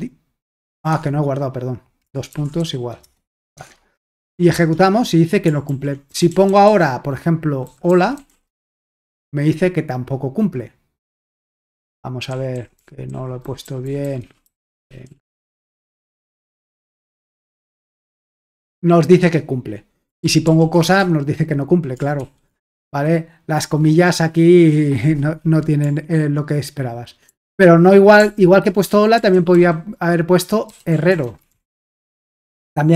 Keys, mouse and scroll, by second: 1.0 alt+Tab, 2.3-2.6 typing, 3.0 Return, 3.7 alt+Tab, 4.1 ctrl+p, 4.6 Return, 6.1 ctrl+p, 6.3 BackSpace, 6.7 BackSpace, 11.8 alt+Tab, 12.1-16.4 typing, 16.6 Return, 17.7 c, 20.2 ctrl+p, 20.5 ctrl+p, 20.8 Return, 22.2 ctrl+l, 27.3 ctrl+p, 28.2 ctrl+p, 29.2-32.0 typing.